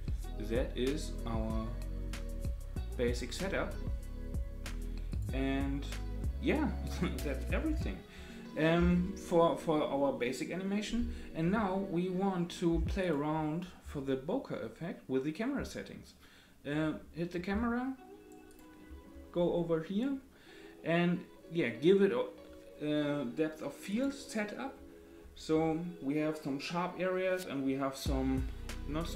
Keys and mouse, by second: 5.1 click, 18.5 click, 23.9 click.